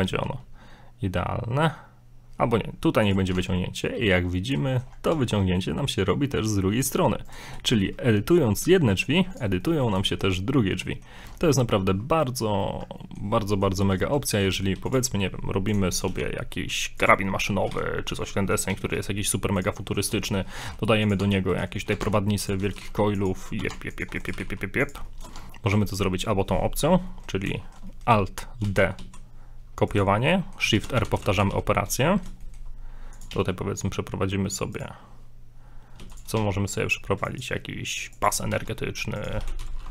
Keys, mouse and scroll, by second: 0.2 e, 3.4 Tab, 3.6 middle click, 4.7 shift+middle click, 4.8 shift+scroll up 3, 5.1 a, 5.5 scroll down 3, 5.6 middle click, 6.6-6.9 scroll up 1, 6.9 Tab, 7.3 right click, 7.7 g, 9.6 scroll down 2, 9.6 middle click, 10.1 shift+middle click, 10.8 middle click, 11.2 Tab, 11.4 middle click, 12.6 scroll up 4, 12.9 scroll down 3, 13.0 middle click, 13.6 middle click, 13.9 right click, 14.3 shift+right click, 14.5 middle click, 14.8 x, 15.7 click, 16.2 shift+a, 17.2 middle click, 17.7 g, 18.4 shift+middle click, 18.7 s, 19.8 middle click, 20.2 shift+middle click, 20.6 shift+middle click, 20.6 g, 21.2 Tab, 21.5 right click, 22.0 ctrl+Tab, 22.6 right click, 22.7 right click, 22.8 g, 23.7 ctrl+Tab, 24.2 right click, 24.3 g, 25.0 shift+middle click, 25.4 Tab, 25.5 middle click, 25.8 shift+middle click, 27.5-28.5 shift+middle drag, 28.7 alt+d, 30.2 middle click, 30.2 scroll down 1, 30.8-31.9 typing, 32.1 middle click, 32.4 shift+middle click, 33.2 click, 33.3 shift+a, 36.0 x, 36.4 shift+a, 38.5 s, 39.4 r.